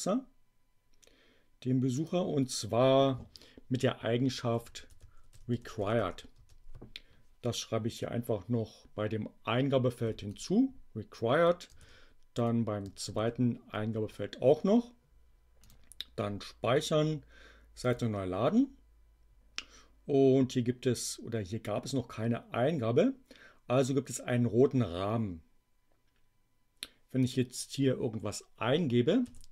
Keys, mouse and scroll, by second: 2.0 click, 4.4-6.5 typing, 10.2-11.3 drag, 12.3 click, 13.1 ctrl+v, 13.7 space, 15.5 click, 17.8 click, 27.1 click, 29.0 2.